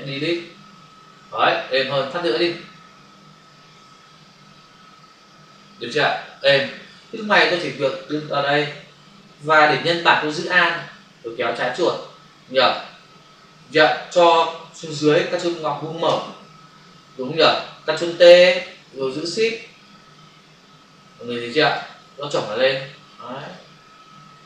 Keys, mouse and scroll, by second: 0.3 Delete, 2.4 Delete, 3.7 ctrl+d, 7.1 v, 8.0 click, 10.7 alt+click, 16.0 ctrl+[, 19.1 shift+click, 22.0 click, 24.2 Return.